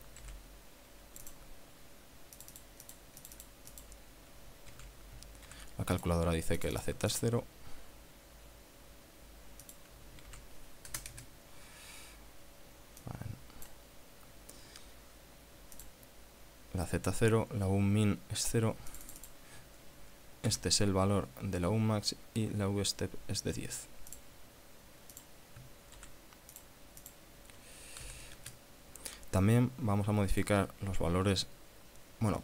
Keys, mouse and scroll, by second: 0.4 ctrl+c, 1.5 click, 2.6-3.0 drag, 3.1 click, 4.9 ctrl+a, 5.7 ctrl+v, 6.2 click, 6.8 click, 7.3 click, 9.8 click, 10.5 ctrl+a, 11.1 KP_0, 11.3 KP_Enter, 13.2 click, 16.1 click, 19.1 click, 20.7 ctrl+c, 24.4 click, 25.4 click, 26.2 ctrl+v, 26.8 click, 27.2 click, 28.2 KP_1, 28.4 KP_0, 28.6 KP_Enter, 29.6 click.